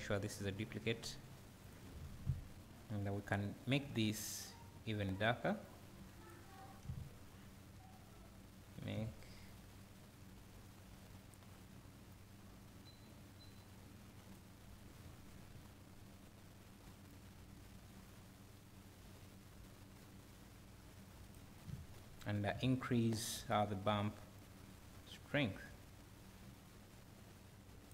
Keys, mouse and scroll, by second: 0.7-1.7 drag, 6.8 `, 12.2-21.6 drag, 15.0 `, 15.9 scroll up 1, 21.6 `, 24.6 click.